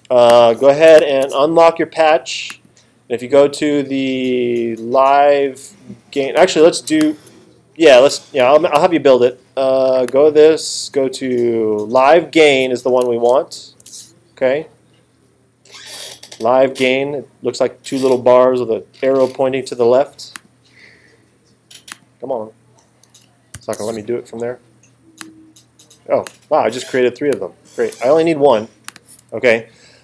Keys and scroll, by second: 13.3 alt+super+8, 23.6 alt+super+8, 27.9 BackSpace, 29.2 BackSpace.